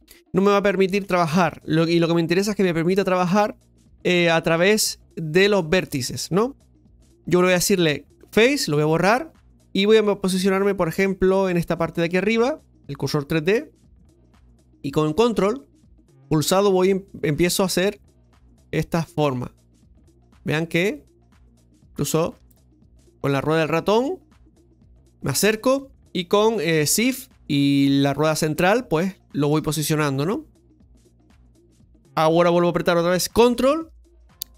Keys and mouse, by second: 11.9 click, 16.6 ctrl+click, 20.7-23.0 ctrl+drag, 23.0-24.8 ctrl+middle drag, 28.5-29.6 shift+middle drag.